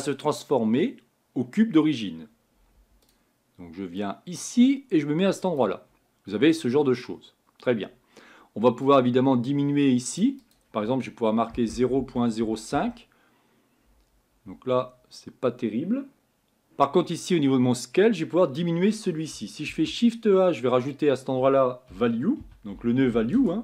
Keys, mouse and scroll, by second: 5.6 click, 9.0-23.4 drag.